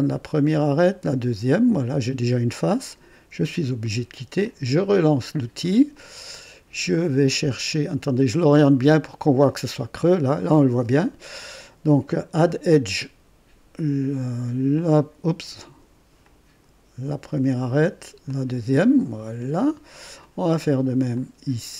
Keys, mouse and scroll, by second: 0.9 click, 2.8 click, 4.4 click, 5.9 click, 6.9 click, 7.9-10.2 drag, 12.3 click, 14.7 click, 16.2 click, 17.3 click, 18.2 click, 19.4 click, 20.2 click, 21.1-21.7 drag.